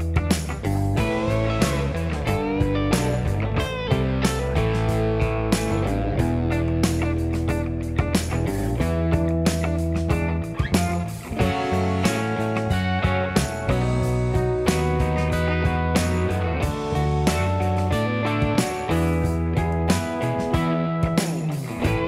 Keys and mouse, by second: 0.0 d, 0.6 d, 1.3 1, 3.2 g, 4.0 click, 4.0 middle click, 4.1 shift+click, 4.1 shift+middle click, 4.3 j, 5.9 shift+click, 6.3 click, 6.4 g, 6.9 g, 7.8 click, 7.8 g, 8.0 g, 9.5 click, 9.7 g, 10.1 shift+click, 10.6 k, 12.1-13.0 typing, 13.5 ctrl+click, 15.9 alt+z, 17.0 alt+z, 17.4 g, 21.2 click, 21.2 middle click, 21.6-22.0 typing.